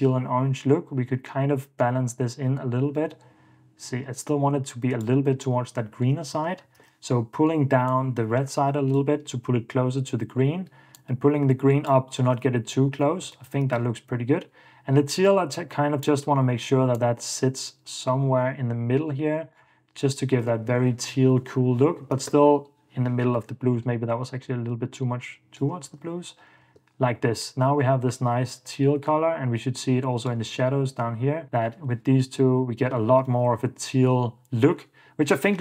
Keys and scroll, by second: 5.8 super+d, 6.4 ↺, 7.0 super+s, 12.6 super+d, 13.8 super+s, 19.7 super+d, 20.5 super+f, 21.8 Escape, 22.3 super+s, 26.0 super+d, 26.6 super+s, 30.6 super+d, 32.4 super+d, 33.3 super+f, 33.9 super+d.